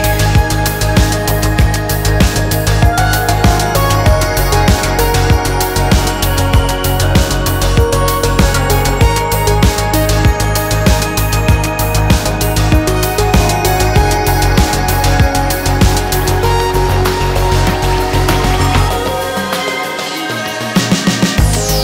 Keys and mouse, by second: 0.9 click, 1.1-1.6 middle drag, 1.8 shift+click, 2.2-5.7 drag, 6.9-8.1 drag, 8.1-9.9 middle drag, 9.9 click, 10.5 ctrl+z, 10.7 ctrl+z, 12.1 ctrl+z, 16.5 2, 17.3 ctrl+b, 19.3 3, 20.2 alt+e.